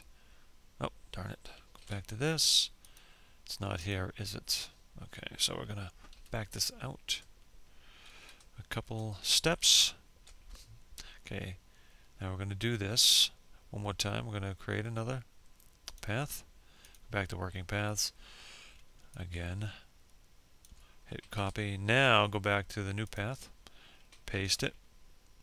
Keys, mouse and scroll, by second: 0.4 ctrl+z, 1.4 click, 4.6 ctrl+z, 6.8 ctrl+z, 7.4 ctrl+z, 8.1 ctrl+z, 14.4 click, 17.6-19.1 ctrl+drag, 19.8 ctrl+c, 21.5 click, 22.7 ctrl+v, 25.3 click.